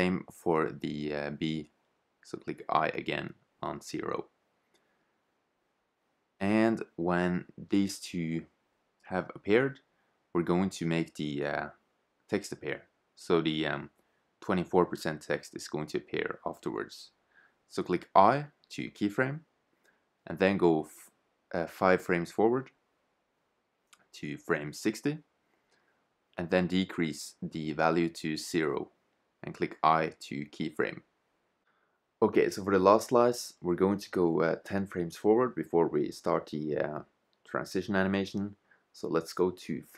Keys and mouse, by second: 0.7-2.6 drag, 2.7 i, 5.1 shift+z, 6.4-7.4 drag, 12.8 shift+z, 13.7-16.0 drag, 16.5-18.2 right drag, 18.5 i, 20.1-22.0 drag, 27.9-29.8 drag, 30.0 i, 37.9-39.8 drag.